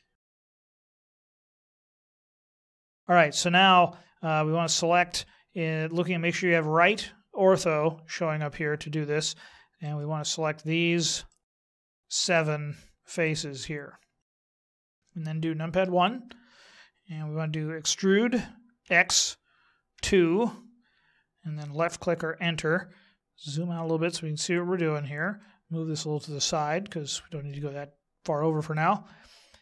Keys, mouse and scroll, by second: 0.5 alt+Home, 9.8 right click, 11.3 shift+right click, 11.6 shift+right click, 11.9 shift+right click, 12.3 shift+right click, 13.2 shift+right click, 14.4 shift+right click, 15.7 KP_1, 17.9 e, 23.0-25.3 scroll down 1, 25.3 shift+middle click.